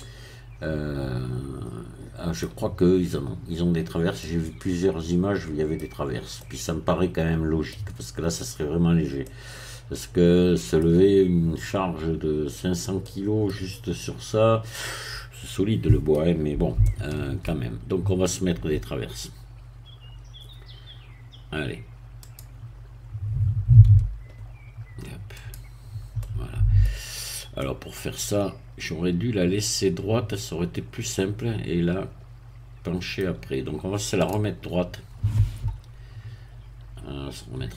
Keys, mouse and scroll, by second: 4.2-5.9 middle drag, 5.9 scroll down 1, 6.4-8.1 middle drag, 9.2-10.8 middle drag, 10.8-11.5 scroll down 1, 12.6-13.0 scroll up 1, 13.0 middle click, 14.7-16.7 middle drag, 16.9-17.9 shift+middle drag, 22.3-23.8 drag, 23.8 z, 25.3 click, 26.2 middle click, 27.2 scroll up 1, 27.6-33.3 middle drag, 34.3 click, 36.2 KP_3, 37.6 KP_1.